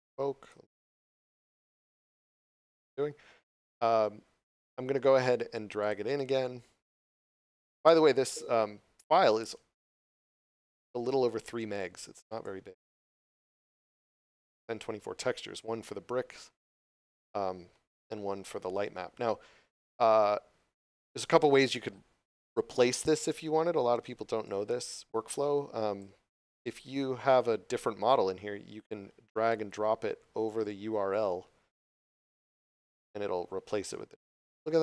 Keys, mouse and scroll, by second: 5.8 click, 10.7 click, 16.9 click, 24.4 click, 29.5 click.